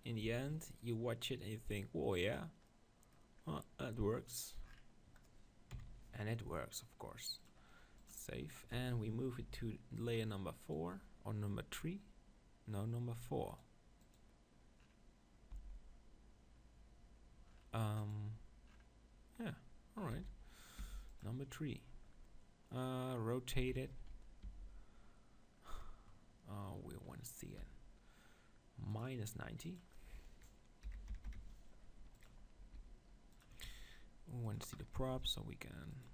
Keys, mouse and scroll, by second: 0.3 Tab, 1.7 click, 5.7 KP_7, 7.5-9.3 drag, 9.4 m, 14.2-16.1 drag, 18.7-20.7 middle drag, 20.1 s, 20.8-22.8 drag, 20.8 g, 22.8-25.4 middle drag, 23.6 z, 24.5 r, 26.7-29.6 middle drag, 27.6 r, 29.6-31.6 drag, 32.6 s, 34.5-36.1 drag, 35.0 g.